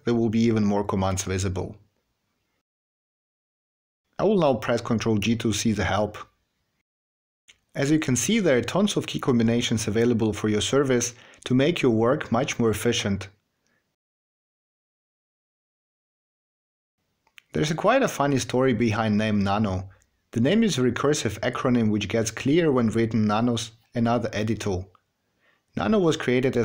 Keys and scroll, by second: 5.0 ctrl+g, 14.6 q.